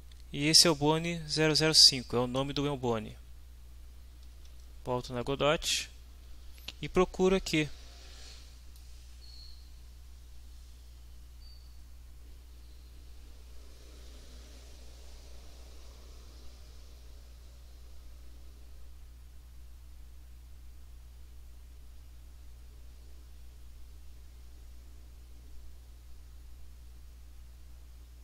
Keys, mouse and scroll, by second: 4.3 alt+Tab, 8.7-28.2 drag.